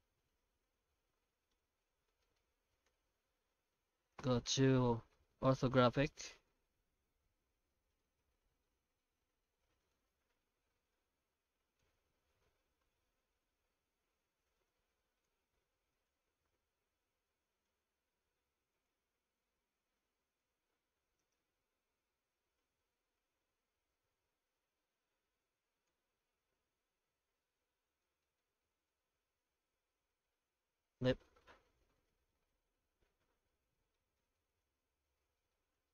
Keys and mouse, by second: 1.7 Tab, 2.2 shift+middle click, 2.5 1, 2.8 alt+a, 4.2 KP_5, 5.5 shift+z, 6.1 click, 6.5 shift+z, 8.0-9.9 middle drag, 10.6 g, 15.6 ctrl+r, 20.7 3, 21.2 alt+shift+right click, 22.0 i, 25.9 Tab, 26.2-28.0 middle drag, 28.2 shift+middle click, 28.6 middle drag, 29.0 Tab, 29.3 a, 30.1 alt+n, 31.3 Tab, 31.6-33.9 middle drag, 34.2 shift+middle drag, 34.9 Tab, 35.3 shift+middle click, 35.7 alt+a.